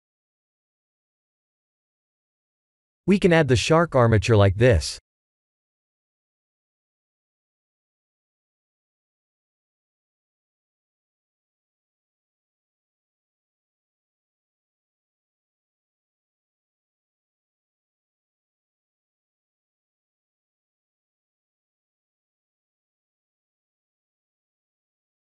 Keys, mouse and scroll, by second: 3.1 shift+middle click, 3.7-4.3 scroll down 4, 4.1 click, 4.4 shift+a, 12.2 r, 17.7 g, 20.0 shift+z, 20.5-21.4 scroll up 3, 21.4 g.